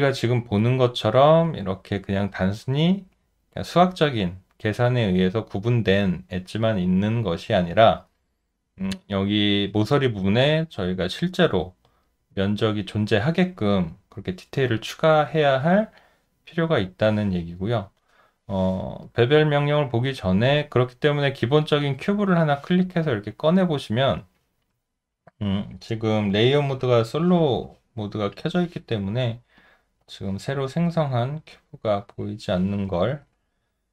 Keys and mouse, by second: 0.6 alt+click, 1.4 alt+right click, 6.3 alt+middle click, 6.7 alt+right click, 7.6 alt+middle click, 8.0 alt+right click, 11.1 alt+middle click, 11.5 alt+right click, 19.0 alt+right click, 19.5 alt+middle click, 20.1 alt+click, 26.7 Delete, 33.2 alt+right click.